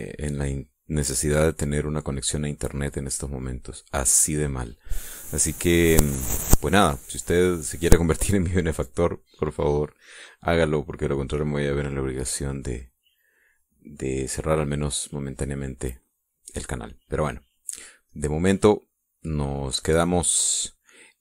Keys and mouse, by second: 11.9 click, 18.8 click.